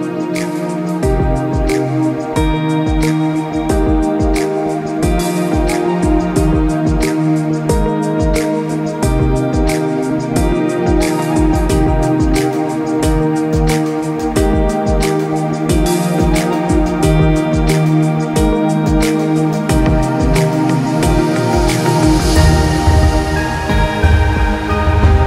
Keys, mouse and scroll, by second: 4.4 click, 4.9 shift+click, 9.4 click, 13.0 click, 18.1 click, 20.8 ctrl+z, 21.2 click.